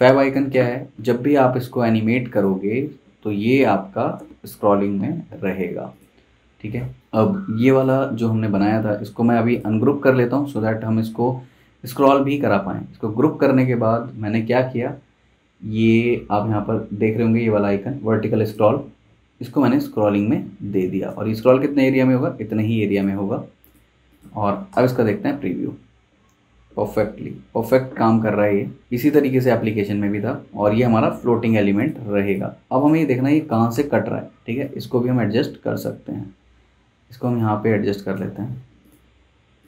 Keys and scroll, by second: 0.5 v, 12.4 super+z, 13.4 super+g, 24.7 super+Return, 33.1 z, 33.7 v.